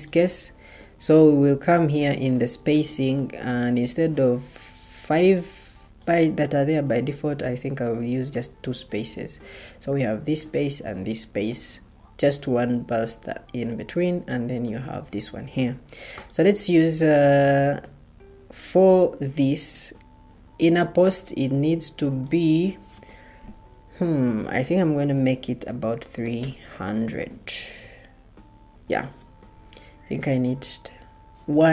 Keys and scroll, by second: 7.3 2, 25.8-26.8 typing.